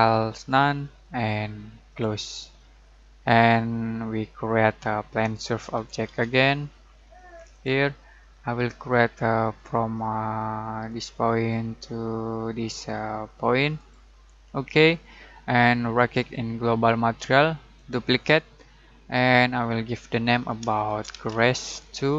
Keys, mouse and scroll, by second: 4.5-5.1 middle click, 5.8 typing, 7.5 click, 10.8 click, 13.7 click, 15.9 right click, 17.7 click, 20.6-22.1 typing.